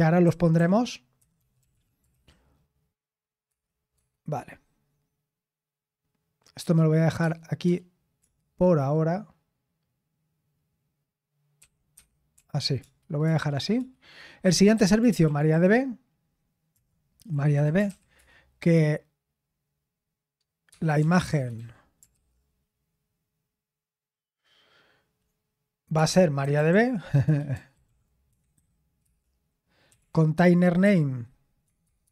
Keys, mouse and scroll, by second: 0.0-2.6 typing, 3.4 Return, 3.9 Tab, 6.5 BackSpace, 7.2 Tab, 7.6 space, 11.5 -, 11.9 Escape, 12.3 o, 13.2 Return, 13.7-16.0 typing, 17.2-18.3 typing, 20.6 Tab, 20.7-22.1 typing, 26.4-32.1 typing.